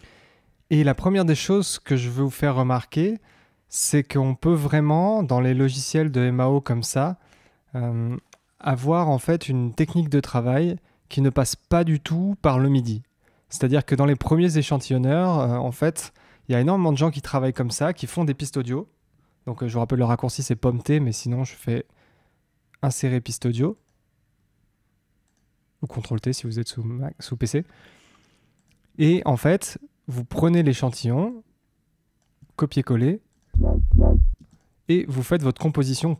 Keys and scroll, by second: 33.5 space.